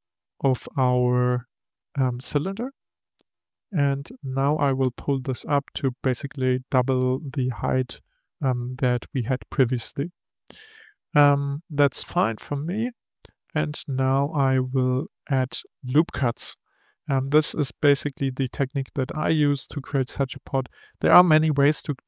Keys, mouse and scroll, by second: 3.3 KP_3, 5.5 click, 17.1-17.8 scroll up 1, 17.8 shift+middle click, 18.5-21.5 scroll up 1.